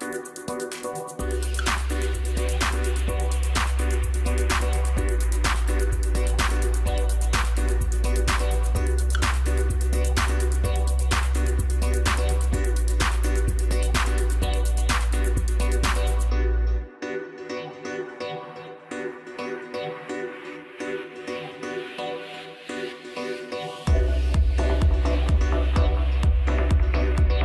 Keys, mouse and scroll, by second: 0.0-3.0 drag, 3.1-3.5 scroll down 2, 3.5 Tab, 4.1-4.4 scroll down 4, 4.4 middle click, 5.8 ctrl+KP_2, 5.9 ctrl+KP_2, 6.9-7.7 scroll up 1, 7.7 KP_1, 9.7-15.4 drag, 15.8 s, 17.5 KP_Divide, 18.3-18.8 scroll down 6, 19.1 s, 19.9 right click, 22.7 g, 25.6 ctrl+a.